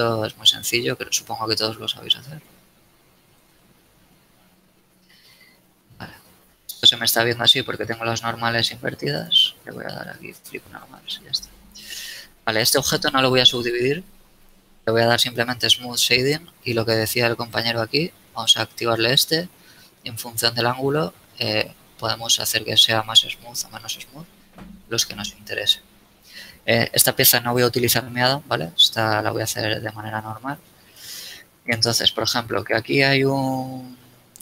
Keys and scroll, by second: 3.3 a, 4.3 Tab, 4.7 z, 7.5 Tab, 11.3 Tab, 29.1 Tab, 30.1 shift+a, 31.3 KP_1, 31.7 z.